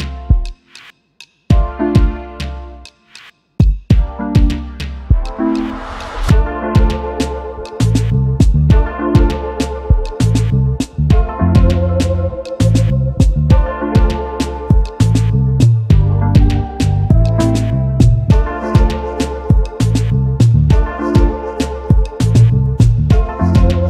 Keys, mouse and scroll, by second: 3.1 double click, 3.8-4.1 alt+scroll up 1, 4.6 right click, 6.1 double click, 7.2 typing, 9.8 alt+scroll down 1, 13.0-13.7 alt+scroll down 2, 14.3 double click, 14.9-15.5 alt+scroll down 1, 15.9-16.2 alt+scroll up 1, 17.0 shift+click, 17.7 alt+scroll down 1, 20.4 double click, 20.8 space.